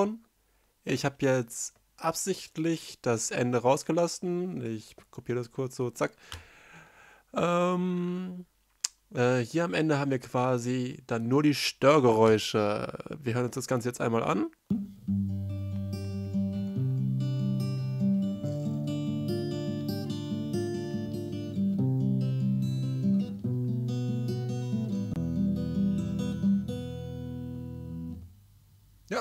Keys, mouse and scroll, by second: 0.0 ctrl+m, 0.1 ctrl+i, 0.2 space, 1.1 space, 13.7 space.